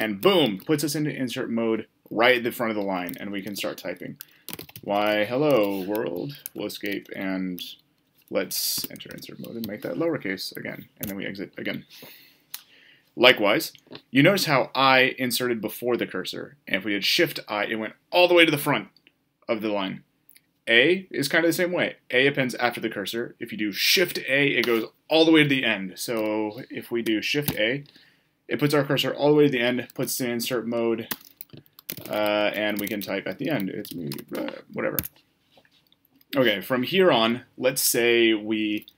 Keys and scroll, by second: 6.5 Escape, 8.5 a, 11.0 Escape, 27.1 shift+a.